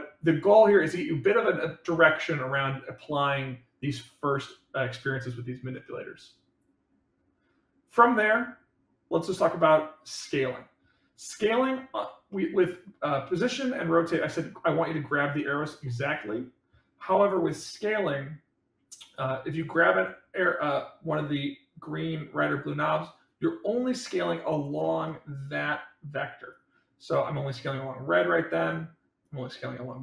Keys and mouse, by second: 12.3-12.8 middle drag, 17.5 click, 19.1-24.6 drag, 25.0 middle click, 26.5-28.7 drag, 29.3-30.0 drag.